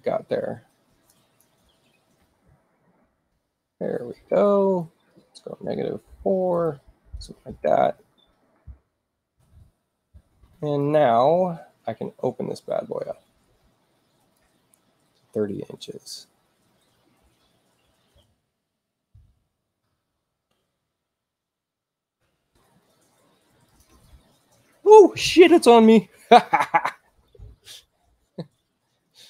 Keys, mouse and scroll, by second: 1.0 click, 1.9-2.7 typing, 4.7 click, 6.0 4, 6.4 Tab, 7.7 click, 9.2 click, 10.7 right click, 14.1 click, 18.1 3, 18.5 Return, 22.5 space, 23.6 click, 29.0-29.2 drag.